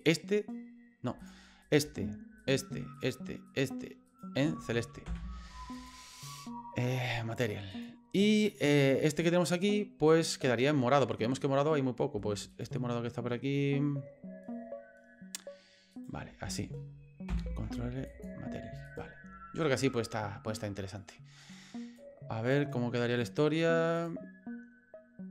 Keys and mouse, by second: 0.0 shift+right click, 1.2 right click, 1.6 right click, 2.4 shift+right click, 3.0 shift+right click, 3.5 shift+right click, 4.1 shift+right click, 5.0 ctrl+l, 8.5 right click, 9.1 right click, 12.5 shift+right click, 15.9 shift+right click, 17.3 ctrl+l, 18.9 right click, 22.0 click, 24.0 click.